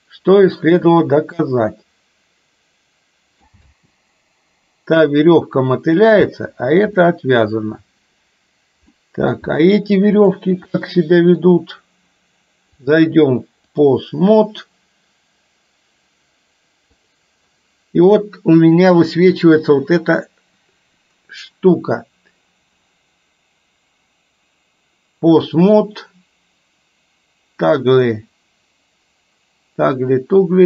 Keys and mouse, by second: 1.2-3.4 middle drag, 3.6 space, 6.3 space, 7.2 middle click, 8.9-9.4 middle drag, 10.2 click, 10.9-11.4 middle drag, 12.8-13.9 drag, 17.1 click, 18.7 click.